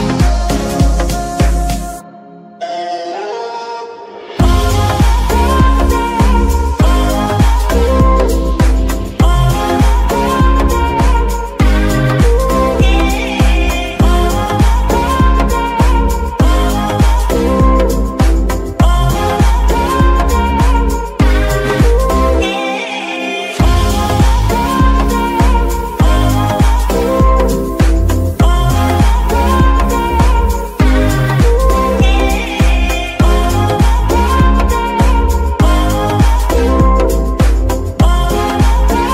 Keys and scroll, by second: 22.2 g, 22.3 y, 24.0 y, 27.0 g.